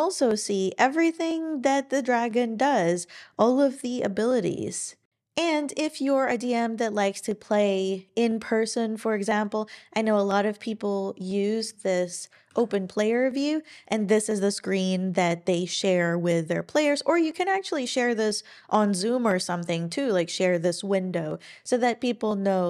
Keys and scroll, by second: 12.5 ctrl+alt+i.